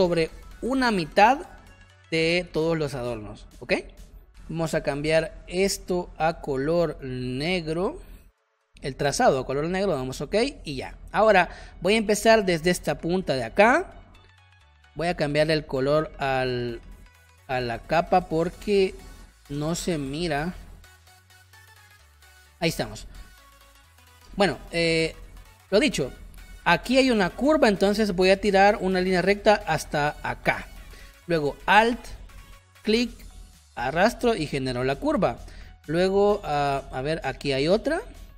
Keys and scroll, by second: 4.4 space, 5.1 shift+x, 10.6 space, 23.7 space, 35.2 space.